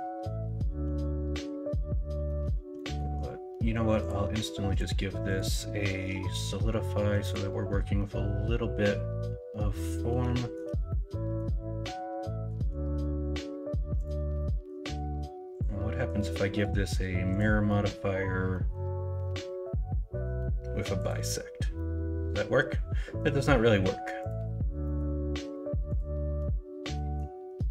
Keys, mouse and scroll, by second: 2.2 middle click, 2.7 middle click, 8.0-10.1 middle drag, 10.3 shift+middle click, 10.8 middle click, 14.4 middle click, 17.6 middle click, 18.5 middle click, 21.7-23.1 middle drag, 24.8 middle click, 26.4 middle click.